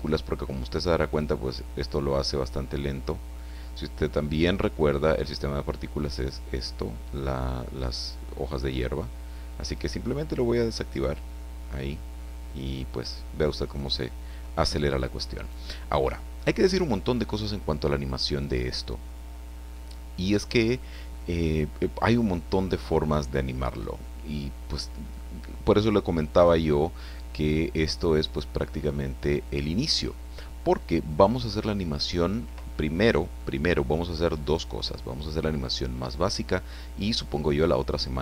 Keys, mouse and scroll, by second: 2.9-3.5 scroll up 2, 10.9 click, 11.6-14.6 right drag, 14.7 scroll down 1, 15.3 right click, 24.2-24.8 scroll down 2, 25.1-25.6 scroll up 1, 26.5-27.2 scroll down 1, 31.1 right click, 33.4-34.5 middle drag.